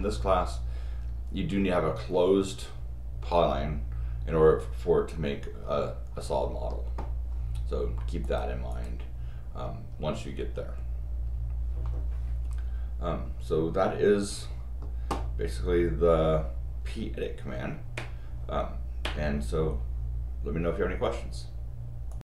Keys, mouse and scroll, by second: 8.2 click, 8.7 click, 12.1 middle click, 22.1 click.